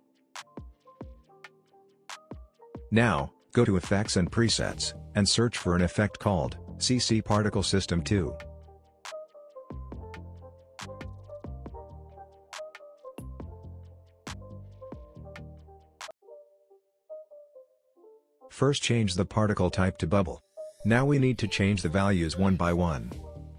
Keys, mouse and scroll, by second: 0.8-2.7 typing, 3.1 Return, 4.3 click, 7.1-8.9 typing, 10.0 click, 13.1-13.5 alt+scroll up 1, 14.0 alt+scroll down 1, 16.2 click.